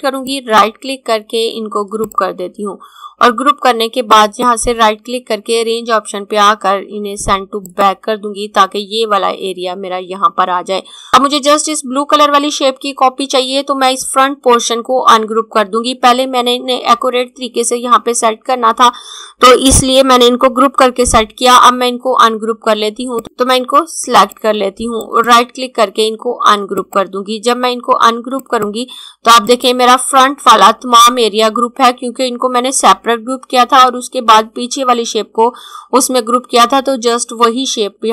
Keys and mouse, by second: 0.3 right click, 2.1 click, 4.1 right click, 7.5 click, 22.9 click, 24.9 right click, 26.6 click.